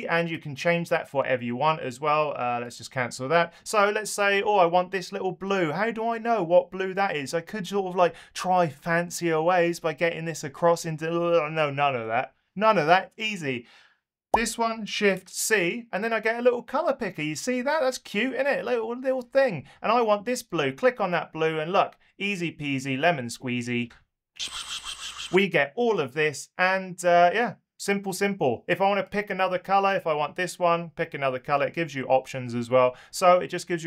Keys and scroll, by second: 14.3 shift+super+c.